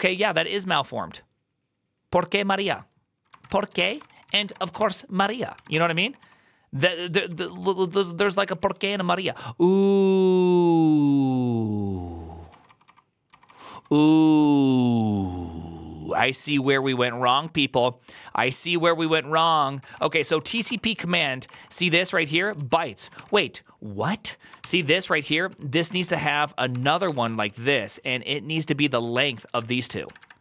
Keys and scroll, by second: 3.4 ctrl+c, 3.5 ctrl+a, 3.7-9.1 typing, 4.0 ctrl+c, 5.0 ctrl+n, 13.6 j, 13.8 j, 13.9 j, 14.1 j, 16.4-17.2 typing, 19.4-30.4 typing, 21.4 ctrl+c.